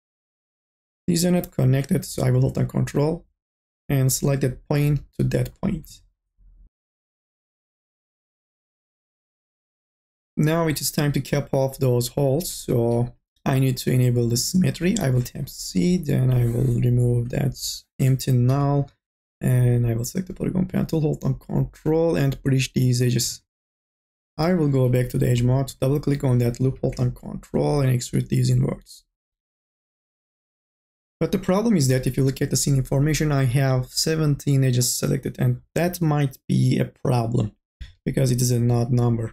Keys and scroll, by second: 15.1 c, 17.5 Delete, 18.1-19.0 typing, 24.3 2, 24.8 e, 26.7 t.